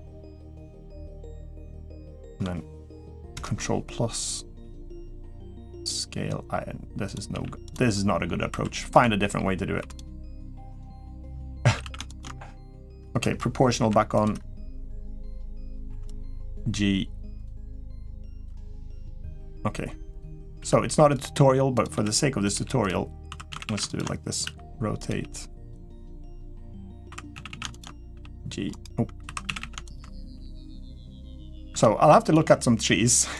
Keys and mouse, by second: 1.1 middle click, 1.6 middle click, 3.1 ctrl+KP_Add, 4.4 s, 7.1 g, 8.3 2, 8.7 click, 9.6-13.6 typing, 11.8 alt+shift+click, 14.0 click, 14.9 click, 15.5 click, 15.9 click, 15.9 2, 16.2 g, 20.4-24.9 typing, 23.7 alt+shift+click, 26.3 click, 26.8 2, 27.1 a, 27.4 a, 28.5-30.1 typing, 29.6 alt+shift+click, 31.5 r, 32.1 s.